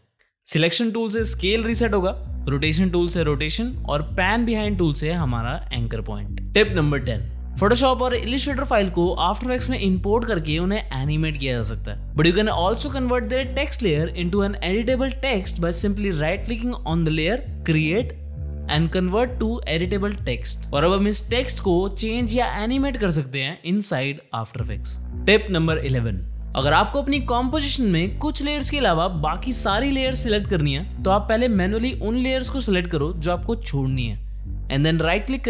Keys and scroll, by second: 13.2 ctrl+w, 21.9 ctrl+z, 22.1 Right, 22.4 o, 24.3 ctrl+Return.